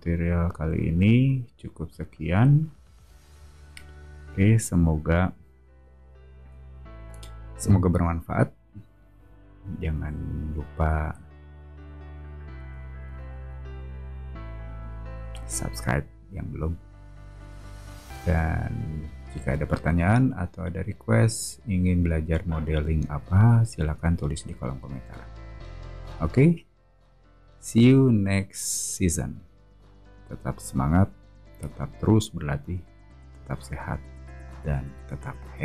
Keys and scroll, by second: 6.4 [.